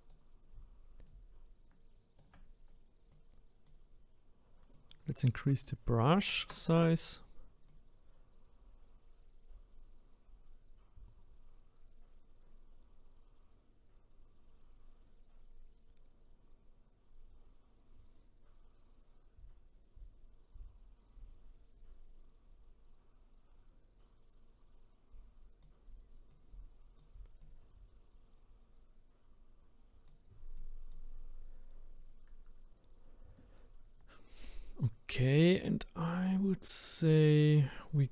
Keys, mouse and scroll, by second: 3.1-10.7 drag, 26.3-33.7 drag.